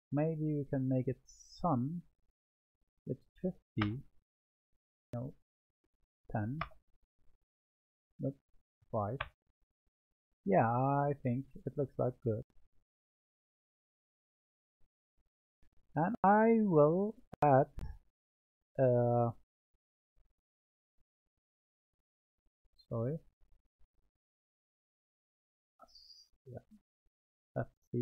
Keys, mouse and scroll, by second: 2.6-13.7 drag, 13.7-21.3 middle drag, 26.4-28.0 drag.